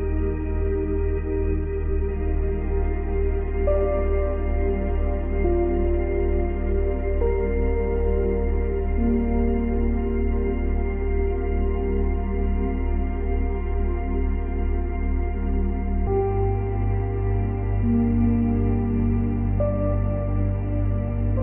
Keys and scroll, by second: 10.3 ctrl+z, 12.8 space, 14.4 space, 17.3 ctrl+z.